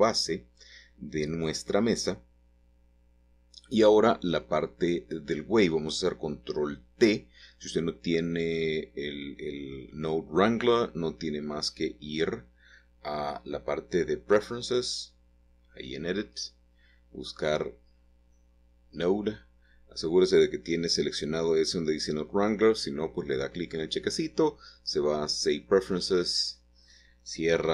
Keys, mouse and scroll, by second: 1.3 middle click, 2.4 click, 2.8 middle click, 3.0 click, 3.2-4.2 middle drag, 6.5 middle click, 7.0 middle click, 8.0-9.6 drag, 12.5 click, 14.1 click, 16.0 click, 17.5-18.0 typing, 19.7 click, 22.9 click, 25.4 click, 26.7-27.7 drag.